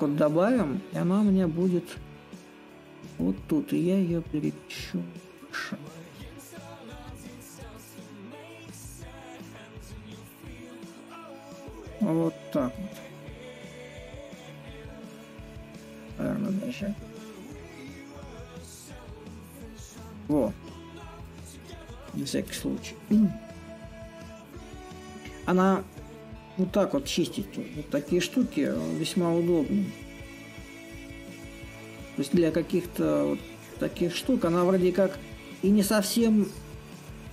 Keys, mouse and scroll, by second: 0.0-5.0 drag, 6.5-12.4 middle drag, 14.1-19.1 drag, 20.8 right click, 26.6 right click, 32.3 right click.